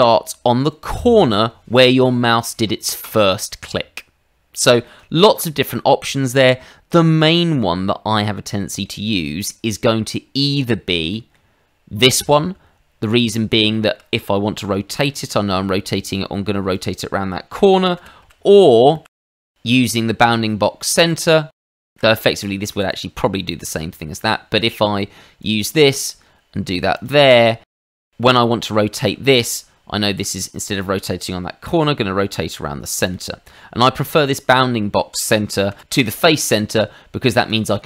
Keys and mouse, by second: 4.8 middle click, 7.9 middle click, 11.1 middle click, 13.0 click, 13.7 shift+middle click, 14.6 r, 16.7 click, 17.9 ctrl+z, 18.2 ctrl+z, 18.9 ctrl+z, 19.2 click, 21.3 middle click, 21.9 ctrl+z, 22.8 click, 24.1 Escape, 24.7 click, 26.9 click, 27.8 click, 28.3 middle click, 28.9 shift+middle click, 30.3 click, 31.8 r, 33.0 click, 33.4 middle click, 35.7 ctrl+z, 36.1 middle click, 37.4 click.